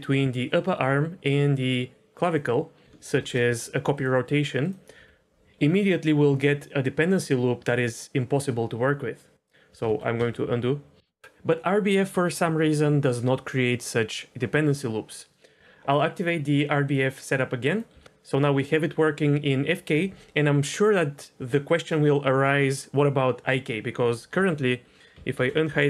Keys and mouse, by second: 2.2 shift+click, 3.1 ctrl+shift+c, 4.9 r, 5.3 ctrl+z, 5.5 r, 9.8 ctrl+z, 10.2 ctrl+z, 11.0 ctrl+z, 16.8 click, 17.7 click, 17.9 r, 24.3 n, 25.4 alt+h.